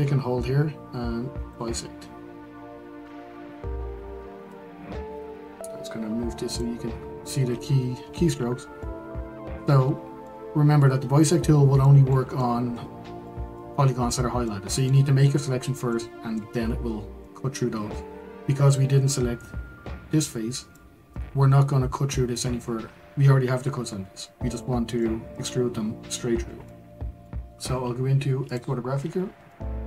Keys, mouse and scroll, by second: 1.5-8.3 drag, 8.3-8.8 scroll down 2, 8.8-18.1 middle drag, 18.1-20.7 scroll up 3, 20.7-28.5 middle drag, 28.5 click, 29.0-29.5 scroll up 2, 29.5 shift+middle click.